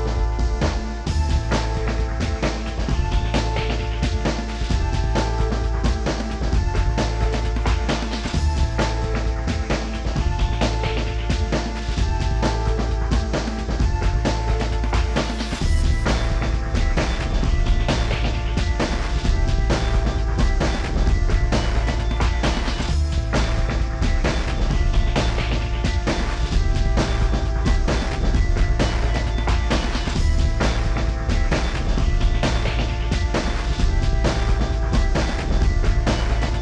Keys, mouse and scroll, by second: 4.4 middle click, 4.5 space, 4.6-5.0 scroll up 19, 5.1-5.4 scroll down 39, 5.4 middle click, 5.8 shift+click, 5.9 middle click, 6.1 shift+middle click, 6.4 scroll up 9, 6.6 middle click, 7.1 scroll up 4, 7.4 shift+click, 7.5 shift+middle click, 7.8 scroll down 6, 8.2 middle click, 8.4 scroll down 3, 8.4-9.0 shift+scroll up 14, 8.4 shift+middle click, 8.5 shift+middle click, 8.7 middle click, 9.0 middle click, 9.4 m, 9.7 shift+click, 9.9 middle click, 10.8 space, 11.0 middle click, 11.2 alt+click, 11.3 middle click, 11.6-12.0 double click, 12.1 b, 12.2 double click, 12.4 double click, 12.5 double click, 12.7 double click, 12.9 b, 13.0 middle click, 13.1 space, 13.3 Escape, 13.3 middle click, 13.8 m, 14.4 shift+click, 14.7 Right, 14.8 Left, 15.0 Right, 15.3 Up, 15.6 middle click, 15.7-17.0 scroll down 58, 16.0 shift+middle click, 16.2 Escape, 16.2 Escape, 16.2 Escape, 16.7 middle click, 17.0 shift+middle click, 17.1 shift+middle click, 17.2 scroll up 12, 17.4 s, 18.8 middle click, 19.3-19.6 scroll down 8, 19.3 shift+middle click, 19.6 double click, 19.8 Escape, 20.0 scroll up 12, 20.5 double click, 20.7 scroll up 6, 20.8 middle click, 21.1 middle click, 25.5 middle click, 25.6 scroll up 13, 25.7 middle click, 26.3 space, 26.5 s, 34.5 middle click, 34.5 scroll down 13, 34.6 space, 34.7 Escape, 34.8 middle click, 35.0 scroll up 4, 35.5 middle click, 35.7 double click, 35.9 double click, 36.2 scroll up 5, 36.3 middle click, 36.5 middle click.